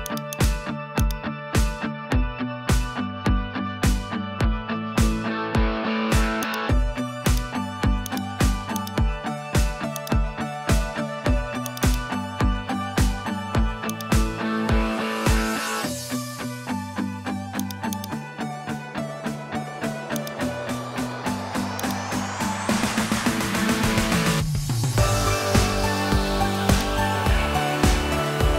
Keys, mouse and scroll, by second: 0.3 click, 1.1-6.5 drag, 7.3 click, 8.8-10.0 drag, 11.7 click, 13.9 click, 15.6 g, 17.1 Tab, 17.6 click, 18.0 click, 19.3 alt+p, 21.3 Tab, 22.2 g, 27.2 g.